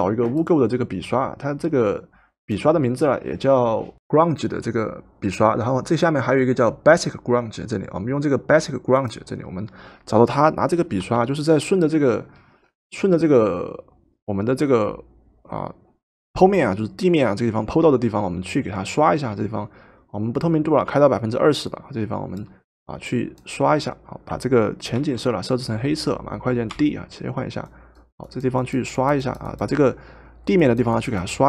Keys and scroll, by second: 11.0 Return, 24.9 ctrl+z, 26.7 d.